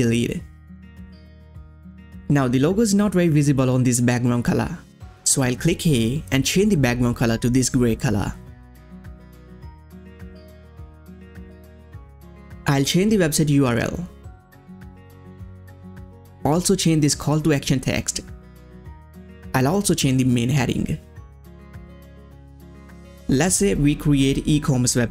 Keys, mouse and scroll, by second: 1.3-2.8 scroll down 1, 5.3 scroll down 1, 5.4 click, 6.4 click, 6.7-8.0 scroll down 1, 8.0 click, 8.9 click, 9.7 scroll up 1, 11.3 click, 11.8 shift+Left, 12.9 shift+Right, 13.0-14.7 typing, 15.3 click, 16.5-18.5 typing, 19.1 click, 21.4-25.1 typing.